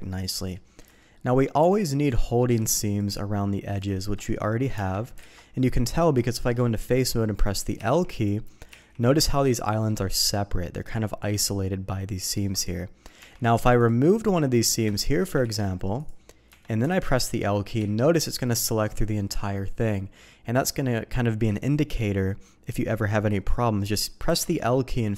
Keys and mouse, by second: 0.2 middle click, 0.9 shift+click, 2.1 alt+click, 2.9 alt+shift+click, 4.4 middle click, 4.7 Tab, 5.3 alt+a, 5.7 click, 6.3 shift+middle click, 7.8 l, 8.7 l, 9.5 click, 13.2 Tab, 13.8 click, 14.9 shift+click, 15.4 ctrl+e, 16.5 Tab, 16.9 alt+a, 17.8 l, 18.7 click, 19.9 click, 20.5 click, 24.3 alt+a.